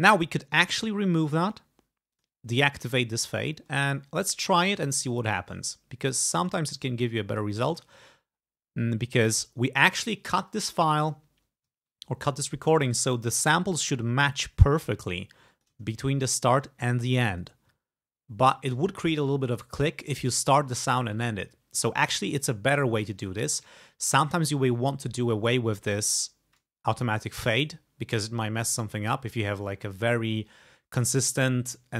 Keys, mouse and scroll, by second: 0.6 right click, 1.5 click, 2.2 click, 2.7-3.7 ctrl+scroll down 4, 4.5-4.9 ctrl+scroll up 2, 5.4 ctrl+click, 5.7-6.3 ctrl+scroll up 4, 6.5 ctrl+click, 6.8 ctrl+right click, 7.4 click, 7.8 click, 8.1 ctrl+scroll up 2, 11.3 ctrl+scroll up 2, 12.4 click, 13.2 ctrl+scroll up 2, 14.1-14.7 ctrl+scroll down 2, 14.9 ctrl+scroll down 2, 15.6 ctrl+click, 15.9-17.3 ctrl+scroll up 6, 18.0-18.7 ctrl+scroll down 4.